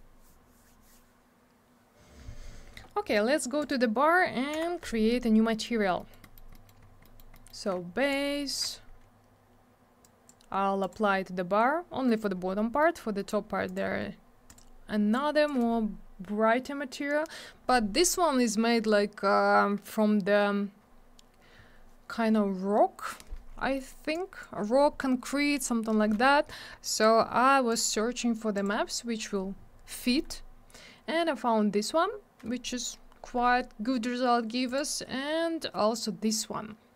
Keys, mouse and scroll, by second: 3.6 click, 3.7 click, 4.5 m, 5.5 middle click, 5.6 middle click, 5.7 scroll down 1, 6.0 middle click, 6.1 double middle click, 6.2 middle click, 6.3 middle click, 6.5 middle click, 6.6 double middle click, 6.8 scroll down 1, 7.0 middle click, 7.1 middle click, 7.3 middle click, 7.4 double middle click, 8.1 shift+click, 10.0 click, 10.8 click, 10.9 click, 12.1 middle click, 12.2 middle click, 12.3-12.9 scroll up 2, 12.8 middle click, 12.9 scroll down 1, 13.1-13.6 scroll up 2, 13.2 middle click, 13.3 double middle click, 13.6 click, 13.7 click, 14.4 click, 14.5 click, 15.1 click, 23.7 middle click, 23.9 middle click, 24.1 click, 26.9 click, 27.0 click, 27.7 click, 27.7 click, 28.5 click, 28.6 click, 29.7 click, 34.6 click, 35.5 click.